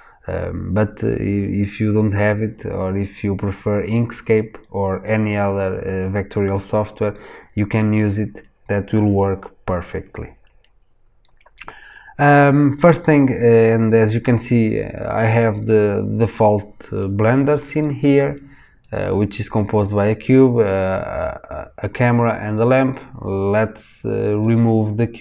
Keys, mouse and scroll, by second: 18.7 click, 19.7 click, 21.1 click, 22.5 click, 24.3 click.